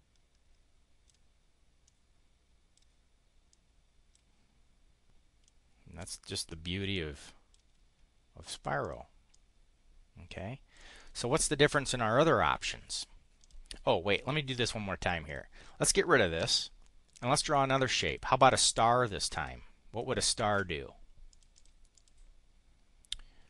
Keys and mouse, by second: 1.8-2.8 drag, 3.5 click, 5.4 click, 6.9 click, 8.5 click, 8.8 click, 9.2-10.8 drag, 11.0 click, 13.3 click, 15.3 click, 16.4 Delete, 18.0 click, 19.4-20.6 ctrl+drag, 21.3 click, 21.9 click.